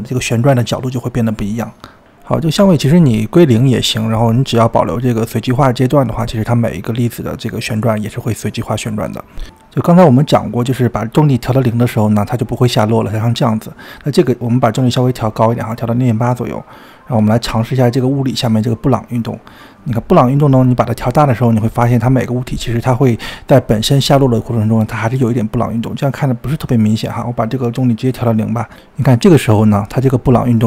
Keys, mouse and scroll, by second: 0.5-4.6 drag, 4.9 click, 5.6-7.3 drag, 8.6-12.6 drag, 13.0 scroll up 1, 15.2-16.5 drag, 16.6-17.9 drag, 18.7-21.9 drag, 23.4-23.7 scroll down 1, 23.7-25.5 shift+middle drag, 25.5-27.2 scroll down 4, 27.2-30.2 drag.